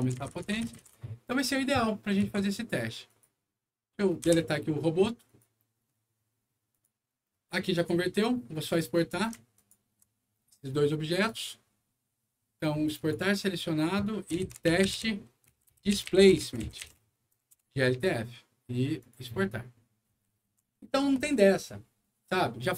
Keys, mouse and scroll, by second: 0.0-0.8 typing, 1.9 middle click, 2.1 Escape, 3.0 click, 4.1 Delete, 5.2 click, 6.6 click, 7.7 click, 8.9 click, 9.5 ctrl+click, 11.0 ctrl+click, 12.9 ctrl+click, 15.6-17.5 typing, 18.9 click.